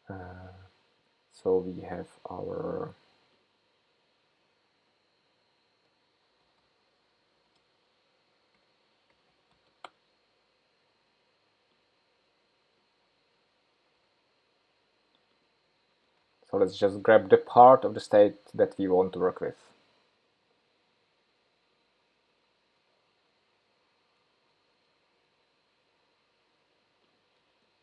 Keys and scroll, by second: 14.0 super+c, 18.8 super+v.